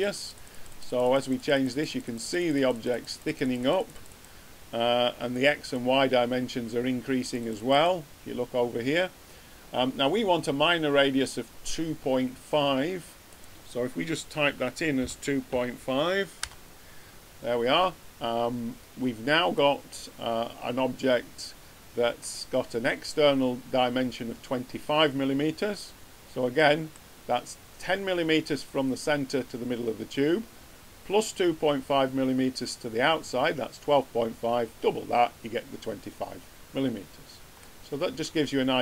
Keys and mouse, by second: 14.9 click, 19.5-20.6 drag, 20.6 middle click, 20.9 click, 26.5 click, 26.6 middle click, 26.7 click, 26.8-28.3 middle drag, 37.9-38.8 drag.